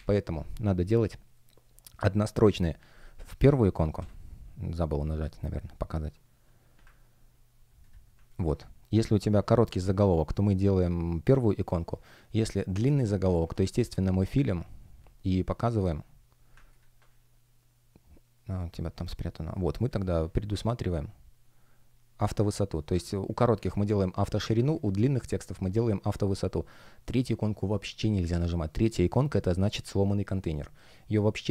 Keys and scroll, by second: 3.7 shift+super+e.